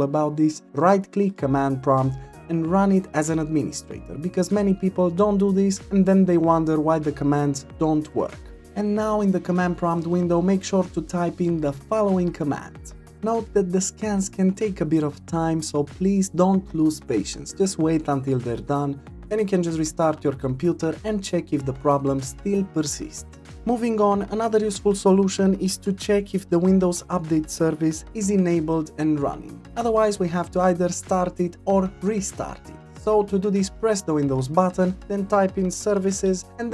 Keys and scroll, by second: 35.5 typing.